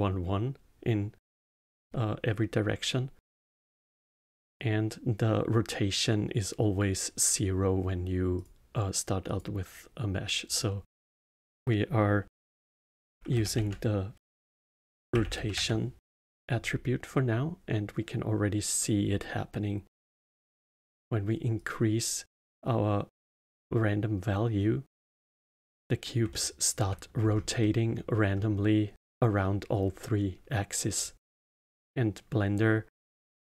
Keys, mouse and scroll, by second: 10.4-13.6 drag, 21.5-24.7 drag, 26.2 alt+middle click, 27.2-27.5 scroll up 2, 27.5 middle click, 28.3-30.5 scroll down 1, 31.4-33.2 middle drag, 33.2-33.4 scroll down 1.